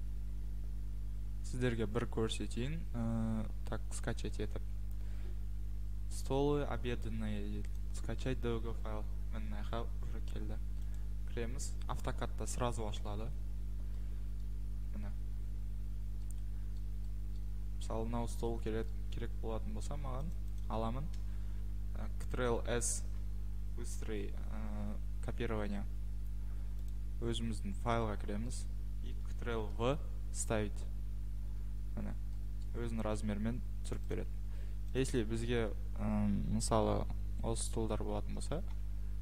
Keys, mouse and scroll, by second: 0.0-0.7 scroll, 0.7-2.1 scroll, 2.6-3.1 scroll, 4.0 click, 4.0 scroll, 7.8 click, 7.8 middle click, 10.9 click, 14.4-15.4 scroll down 5, 15.4-15.9 scroll down 1, 16.3-17.0 scroll, 17.4-17.7 scroll, 18.5-18.9 scroll, 19.4 scroll, 20.3 click, 20.6 click, 22.9 ctrl+c, 26.9 click, 28.0 middle click, 28.1 middle click, 28.5 middle click, 29.7 ctrl+v, 30.9 middle click, 31.4-32.2 scroll, 32.6 scroll, 33.0 click, 33.1 Escape, 33.5-33.9 scroll, 33.9 click, 34.1 click, 34.3 Escape, 35.0 click, 35.1 click, 38.7 Escape.